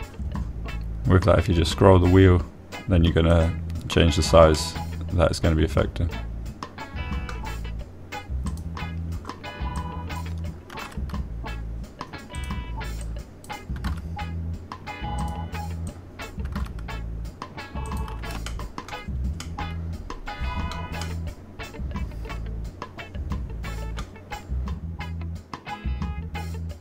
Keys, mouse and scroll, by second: 0.7 s, 1.1 x, 4.7 click, 5.9-8.7 drag, 5.9-8.7 middle drag, 9.9 click, 11.1 click, 12.1 s, 13.7 click, 14.4 click, 15.3 x, 16.6 click, 17.3 click, 17.8 s, 18.0 x, 19.2 click, 19.8 shift+middle click, 20.8-22.0 middle drag, 22.4-25.4 middle drag.